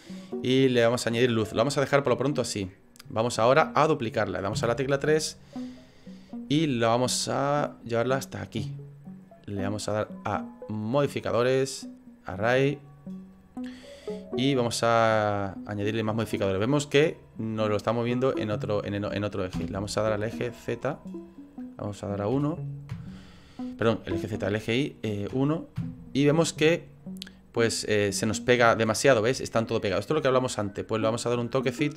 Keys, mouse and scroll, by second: 2.5 middle click, 4.5 KP_3, 6.6 shift+middle click, 7.7 click, 11.2 click, 12.2 click, 21.3 click, 24.1 ctrl+z, 24.7 click, 28.7-29.2 scroll up 3, 29.2 shift+middle click, 29.6 shift+middle click, 31.4 click.